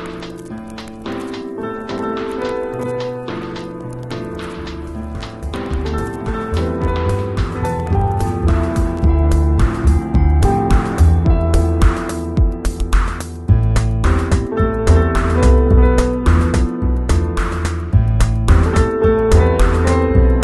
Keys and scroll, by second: 0.8 g, 13.4 v.